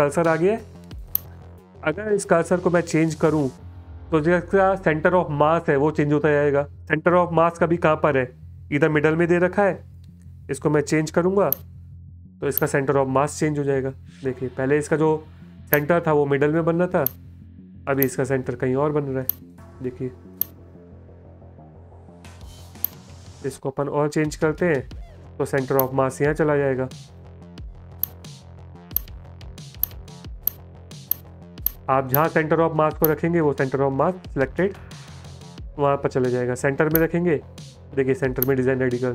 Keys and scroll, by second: 13.7 space, 16.3 space, 18.3 space, 26.9 space, 37.5 space.